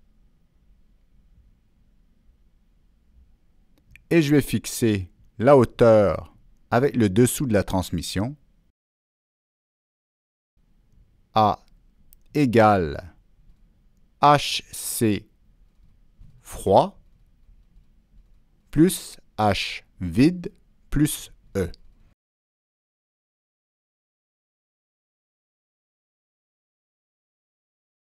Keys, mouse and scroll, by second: 2.6 click, 5.4 click, 6.5 click, 7.1 right click, 8.2 click, 9.0 click, 9.0 right click, 9.8 click, 9.8 right click, 11.0 click, 11.0 right click, 11.3 click, 16.1 Down, 20.4 Return, 22.7 Return, 22.7 Delete, 23.3 Down, 23.7 Return, 25.7 Delete, 25.7 Down, 25.7 Return, 26.6 Delete, 26.6 Down, 26.6 Return, 27.5 Return.